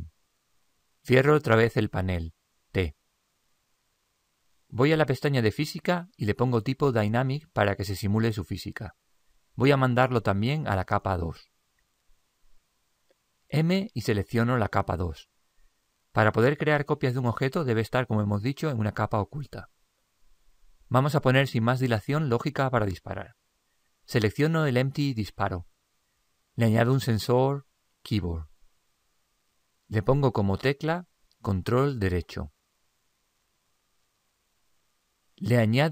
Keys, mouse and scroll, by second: 3.0 t, 6.5-9.1 drag, 13.9 m, 25.1-27.1 right drag, 28.7 click, 30.8 click.